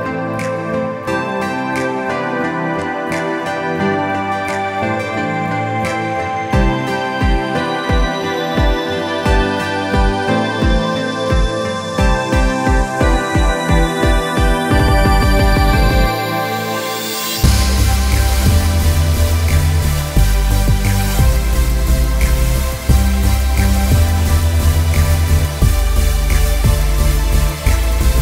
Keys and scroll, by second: 18.3 ctrl+-, 18.5 ctrl+-, 18.7 ctrl+-, 23.2 ctrl+-, 27.0 ctrl+-, 27.1 ctrl+-, 27.5 ctrl+0, 27.6 ctrl+-.